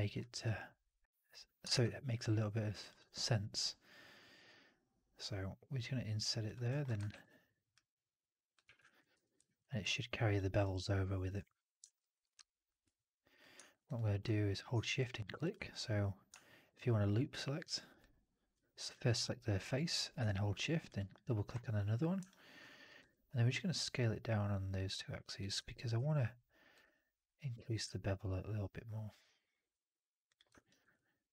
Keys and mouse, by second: 0.2 3, 1.6 shift+Tab, 7.0 ctrl+e, 8.5 w, 8.7 alt+click, 9.0 4, 9.3 alt+middle drag, 9.5 alt+right drag, 9.7-10.4 alt+drag, 10.4 alt+right drag, 10.6-11.1 alt+drag, 11.9-12.7 typing, 11.9 alt+right drag, 12.1-12.6 alt+drag, 13.2 click, 13.8 click, 15.0 typing, 15.4 shift+click, 17.8 shift+click, 18.7-20.1 drag, 22.2 alt+click, 24.0-25.3 drag, 25.5 4, 25.8 q, 30.4 alt+right drag, 30.7 alt+right drag, 30.8-31.3 alt+drag.